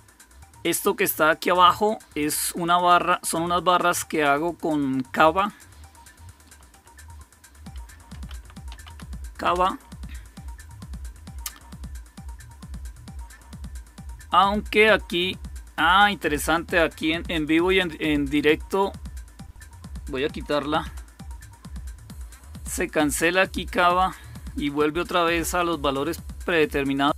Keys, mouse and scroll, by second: 5.3 click, 6.6 q, 7.8-9.2 typing, 9.4 Return, 16.4 click, 20.7 q, 23.9 click, 24.5 Up, 25.2 Return.